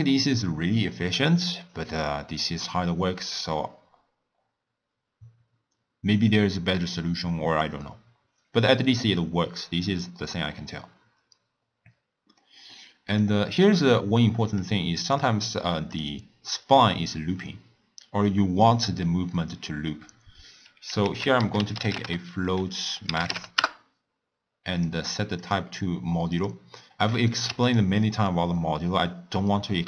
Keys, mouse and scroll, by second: 12.4 middle click, 13.2 click, 14.6 click, 15.9 click, 21.0 ctrl+a, 25.4-27.7 drag.